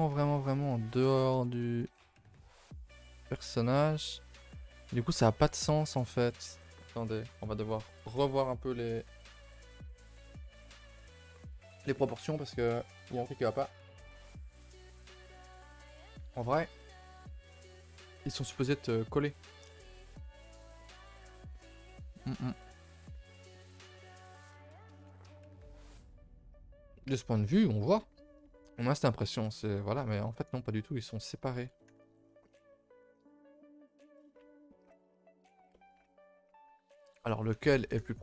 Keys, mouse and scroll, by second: 0.1 alt+h, 0.7 click, 1.2 shift+click, 1.8 g, 3.7 scroll down 2, 3.9-4.9 middle drag, 4.9 scroll down 2, 5.1-23.9 middle drag, 23.9 KP_0, 24.5 a, 24.6 a, 24.8 scroll down 1, 27.6-29.2 scroll down 3, 29.2-29.5 middle drag, 29.5-29.9 scroll up 4, 29.9-30.4 shift+middle drag, 30.4-31.4 scroll up 2, 31.5 a, 31.7 a, 32.2-37.5 middle drag, 37.5 a, 37.7 a.